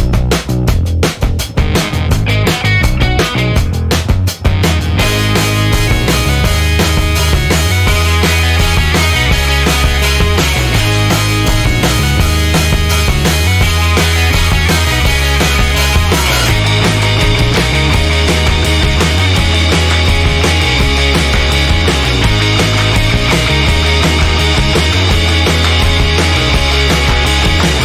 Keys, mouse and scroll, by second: 0.3 click, 1.7 click, 2.9-3.6 scroll down 1, 6.0 middle click, 7.2 click, 8.6 click, 9.9 click, 10.3 click, 11.6 BackSpace, 12.8 BackSpace, 13.0 1, 13.3 0, 15.1 click, 16.9 0, 18.3 click, 19.8 click, 21.0 0, 21.9 click, 22.3 1, 22.8 click, 25.6-25.9 scroll down 2, 26.2 scroll up 2, 26.7 click.